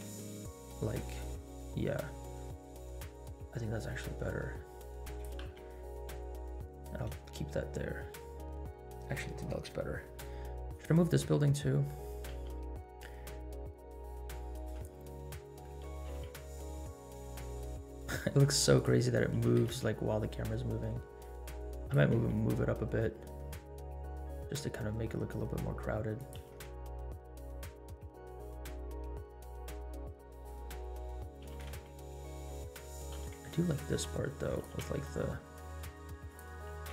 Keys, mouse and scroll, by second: 5.2 g, 7.3 space, 10.2 right click, 10.7 click, 11.7 middle click, 12.5 r, 13.5-13.9 middle drag, 14.5 shift+click, 15.6 middle drag, 16.1 r, 19.1-21.9 middle drag, 19.4 g, 21.9 r, 26.3 g, 30.7 scroll down 1, 30.9 middle click, 31.4 g, 33.1 r, 34.7 g, 36.7 g.